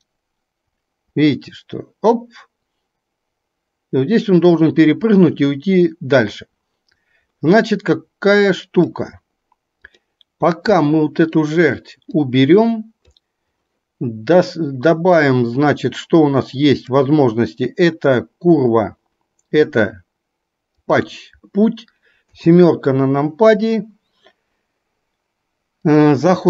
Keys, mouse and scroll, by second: 10.9-11.6 middle drag, 12.1-13.2 drag, 16.9-21.1 drag, 22.5 KP_7, 25.9-26.4 drag.